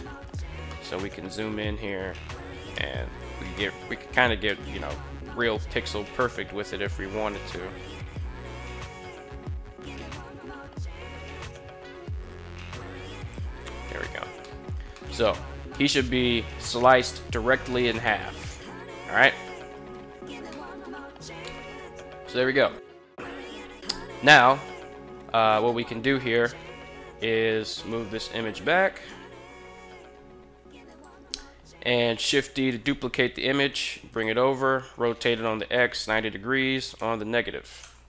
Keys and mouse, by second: 0.5 shift+middle drag, 2.5 shift+middle drag, 3.3 shift+middle drag, 4.1 shift+middle click, 5.8 g, 7.1 x, 13.0 shift+click, 14.2 shift+middle drag, 14.6 shift+middle drag, 15.5 shift+middle click, 17.4 shift+middle drag, 17.9 shift+middle drag, 20.3 shift+middle drag, 21.2 shift+middle click, 25.1 right click, 26.4 KP_7, 27.4 g, 27.7 y, 30.7 click, 32.1 shift+d, 33.9 click, 34.5 r, 35.5 9, 35.7 0, 36.6 -, 37.6 Return.